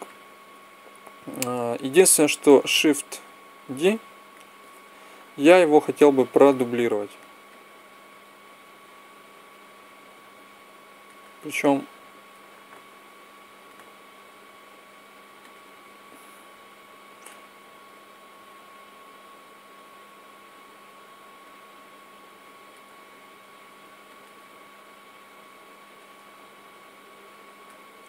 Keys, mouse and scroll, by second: 3.5 shift+d, 5.6 click, 9.0 click, 11.5-13.0 drag, 14.2 s, 16.0 click, 17.8 middle click, 19.7 middle click, 23.3 s, 25.1-26.5 drag.